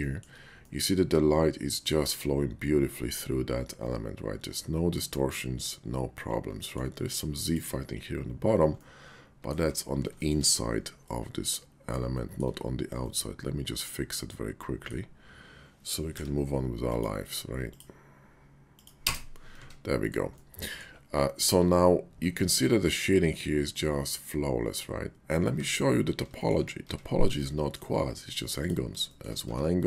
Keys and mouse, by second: 0.0 shift+drag, 0.7-6.7 middle drag, 7.4 click, 8.2 /, 8.8-9.5 middle drag, 9.7 Tab, 11.1 middle click, 12.1 shift+click, 13.0 middle click, 13.2 click, 13.3 middle click, 13.4 click, 13.5 middle click, 13.9 click, 14.0 middle click, 16.0 k, 19.5 Tab, 20.3-20.8 middle drag, 20.4 drag, 21.8 /, 22.8-25.3 middle drag, 25.5 Tab, 26.4 shift+click, 26.8 Tab, 27.3 click, 28.4 click, 29.1 shift+click, 29.4 Tab.